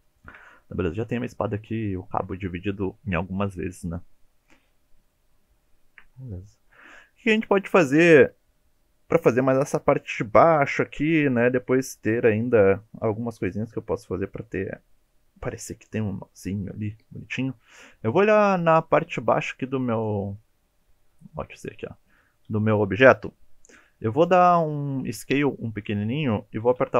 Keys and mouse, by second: 0.1 shift+middle click, 1.0 click, 5.1 shift+middle click, 5.7 shift+middle drag, 17.9 middle click, 19.6 3, 20.4 click, 21.0 alt+z, 21.3 click, 21.9 click, 25.2 e, 26.2 click, 26.8 s.